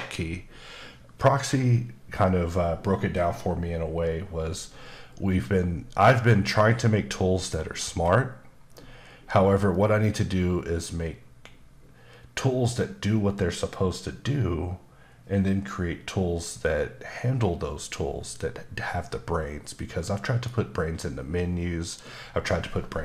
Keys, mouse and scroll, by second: 6.0 middle click, 7.9-9.7 scroll up 1, 9.7 middle click.